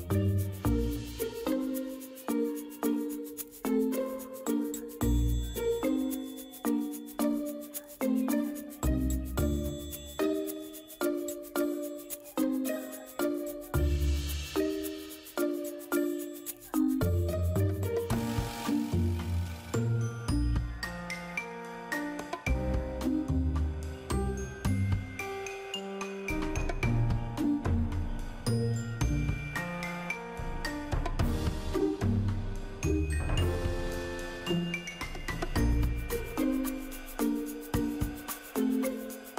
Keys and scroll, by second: 6.3 ctrl+j, 24.7 ctrl+g.